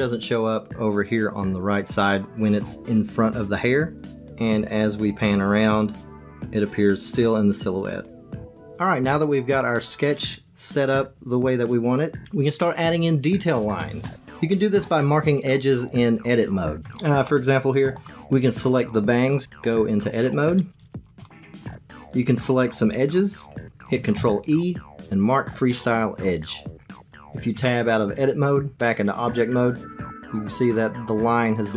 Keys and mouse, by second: 3.9-8.0 middle drag, 17.2 middle click, 18.5 click, 19.4 Tab, 21.2 shift+click, 21.4 shift+middle click, 23.0 click, 24.1 ctrl+e, 27.5 Tab.